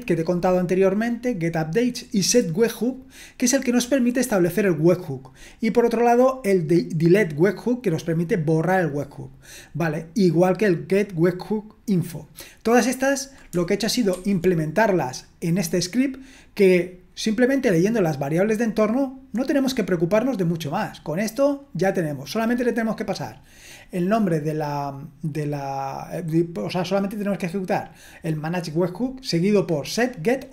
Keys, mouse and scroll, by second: 0.0-5.3 scroll down 1, 5.3-14.1 scroll down 1, 14.1 super+1.